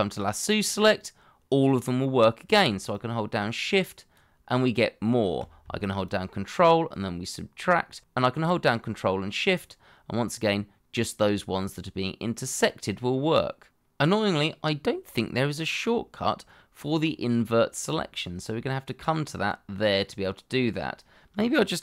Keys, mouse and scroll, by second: 2.9 shift+click, 6.0 ctrl+click, 9.5 ctrl+shift+click.